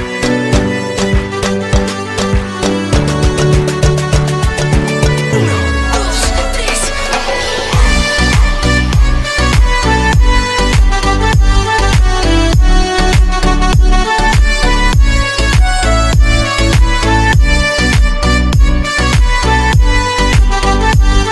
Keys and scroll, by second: 13.1 ctrl+q, 19.3 c.